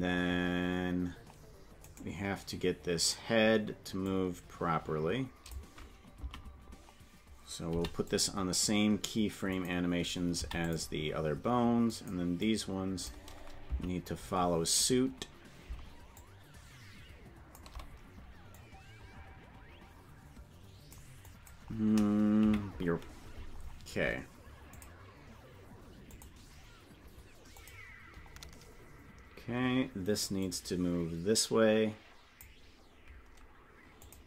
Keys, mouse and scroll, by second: 4.1 click, 4.1 right click, 6.3 Right, 7.7 i, 9.6 click, 10.3 i, 12.0 click, 12.5 click, 13.8 Left, 16.1-17.6 shift+drag, 18.6-21.0 drag, 21.3 click, 22.4 KP_Decimal, 24.7 click, 26.1 click, 27.5 click, 30.4-32.4 drag, 34.0 click.